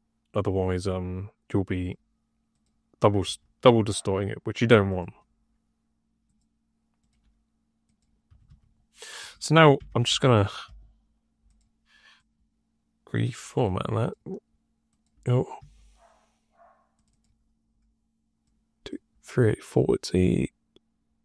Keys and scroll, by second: 3.1 d, 3.5 d, 8.2 d, 8.4 d, 9.7 Tab, 10.2 r, 10.5 f, 15.5 1.